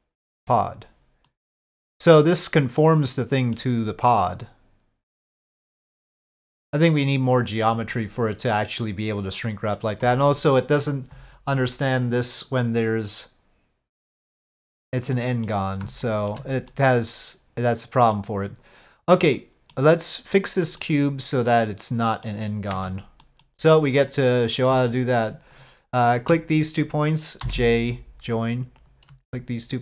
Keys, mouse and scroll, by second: 1.2-3.5 middle drag, 4.1-6.9 middle drag, 6.9 click, 7.5 middle click, 8.0-9.8 middle drag, 15.1 middle click, 16.1 shift+middle click, 16.7-18.1 middle drag, 19.3 middle click, 20.9-22.3 middle drag, 22.7 1, 23.2 middle click, 24.1 click, 27.4 j.